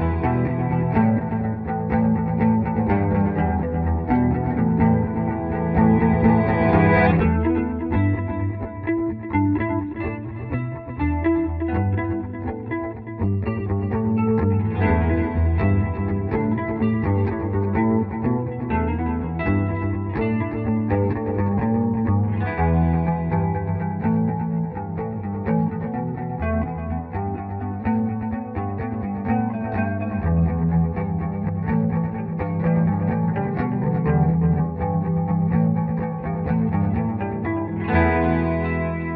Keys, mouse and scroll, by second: 2.2 c, 2.6 Escape, 4.0 click, 4.7 shift+click, 6.9 Escape, 7.4 click, 7.7 Delete, 8.2 click, 9.5 click, 11.0 right click, 12.3 click, 13.0 Escape, 13.3 F3, 13.6 F4, 14.4 click, 16.0 shift+Page_Up, 19.2-21.0 drag, 21.0-22.2 ctrl+right drag, 22.2 Escape, 22.9 click, 25.3 click, 26.7 right click, 27.7 click, 28.7 F3, 28.9 F4, 29.7 click, 31.6 shift+Return, 32.1 shift+right click, 32.9 click, 33.7 Escape, 37.1 click, 37.3-39.1 drag.